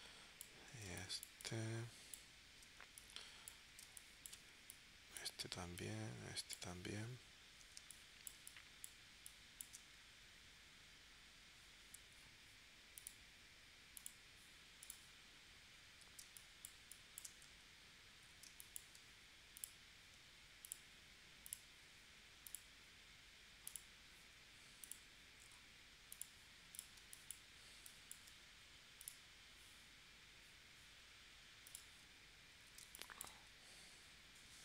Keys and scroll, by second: 0.9 space, 3.8 space, 7.8 space, 16.3 space, 18.5 space, 27.0 space, 32.8 space.